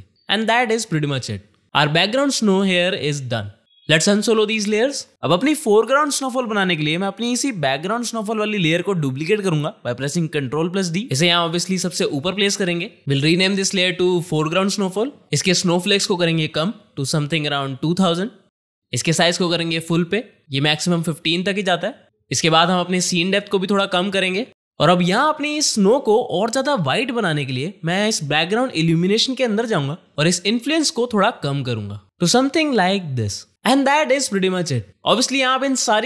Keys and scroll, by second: 0.7 space, 10.4 ctrl+d, 13.1 Return, 13.4 ctrl+shift+Left, 13.4-14.5 typing.